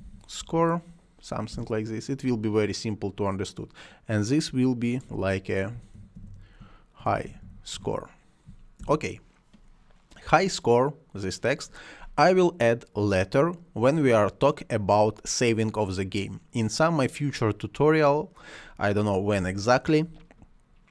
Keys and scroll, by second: 0.0-1.0 typing, 1.5 Return, 5.4-8.2 typing, 8.7 Return.